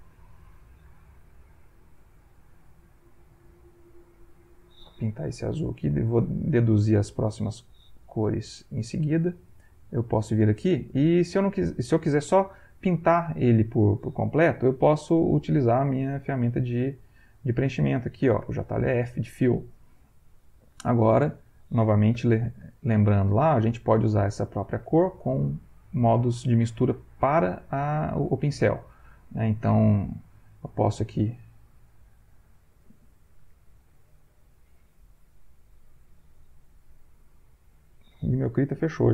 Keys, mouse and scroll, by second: 1.0-2.2 shift+drag, 2.7-4.9 drag, 5.8 click, 7.7 ctrl+z, 9.7 click, 10.1 click, 18.4 f, 18.7 click, 22.1 b, 22.6 shift+click, 24.2 ctrl+click, 25.3-28.7 drag, 28.9 shift+click, 29.9 shift+click, 31.1-32.6 drag, 32.8 click, 33.5 shift+click, 34.3 shift+click, 35.7 click, 36.6 click.